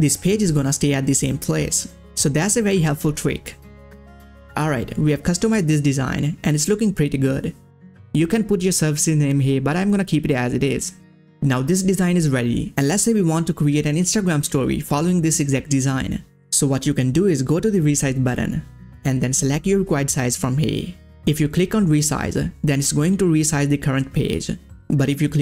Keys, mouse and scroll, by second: 2.5 click, 2.5 click, 3.8-5.0 ctrl+scroll up 1, 17.4 scroll up 1, 17.4 click, 19.7 click, 19.7 click.